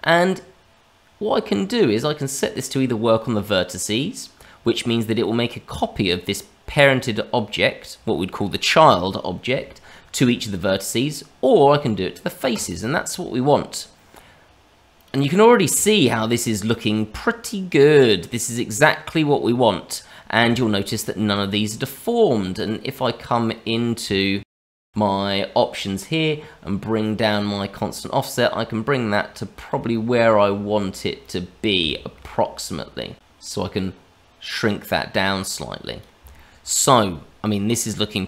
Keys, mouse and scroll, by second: 12.5 click, 13.3-14.9 scroll down 2, 14.9 click, 15.8 shift+middle click, 20.2 scroll up 2, 20.5 shift+middle click, 22.5 click, 24.1 shift+middle click, 24.5 middle click, 27.2 click, 29.9 middle click, 31.2 click, 31.8 shift+middle click, 33.1 click, 36.3 shift+middle click.